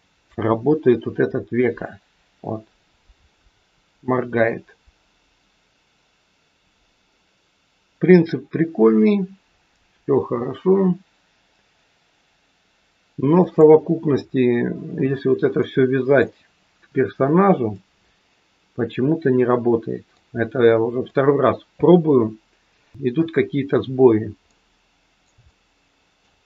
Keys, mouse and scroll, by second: 0.3 r, 13.9-15.6 scroll down 5, 15.6 middle click, 17.7 middle click, 20.3-20.7 scroll up 3, 20.9 middle click, 23.9-24.5 scroll down 3, 24.5 middle click, 25.5 shift+middle click.